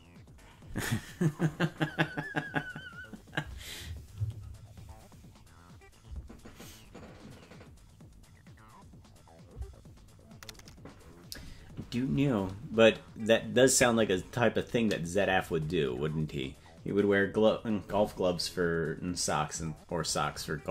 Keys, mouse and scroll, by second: 13.7 click.